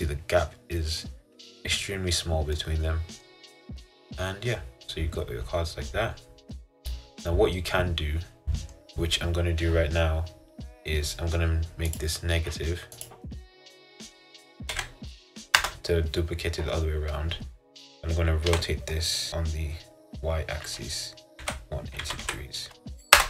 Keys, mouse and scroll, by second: 0.5 middle click, 1.2-2.0 scroll down 2, 2.0-2.7 scroll down 1, 2.7 middle click, 3.4-3.9 scroll down 3, 3.9-7.0 middle drag, 18.6 r.